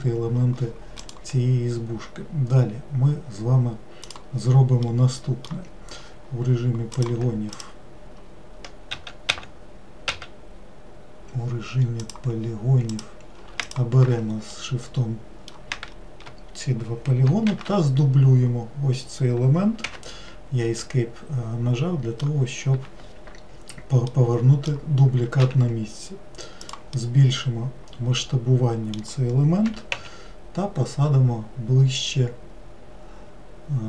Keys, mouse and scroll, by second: 4.8-6.9 middle drag, 6.9-8.9 drag, 8.9 w, 9.3 w, 12.0-13.0 drag, 13.6 shift+click, 14.5-17.5 middle drag, 17.5 shift+d, 20.8-23.8 middle drag, 24.1-25.4 middle drag, 25.4 s, 27.0-29.7 middle drag, 29.7 g.